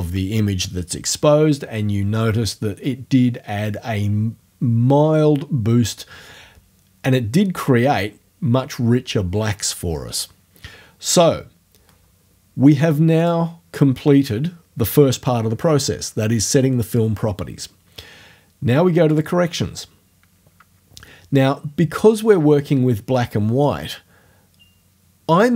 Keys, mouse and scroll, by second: 13.2 click, 19.2 click.